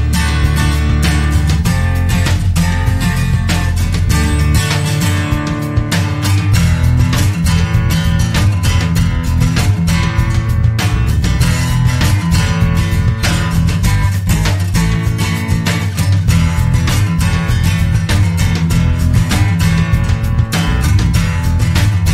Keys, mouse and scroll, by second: 1.4 click, 2.8 click, 3.5-5.9 typing, 7.3 click, 10.0-10.9 drag, 11.9 click, 14.1-14.9 drag, 17.3 click, 20.2 click.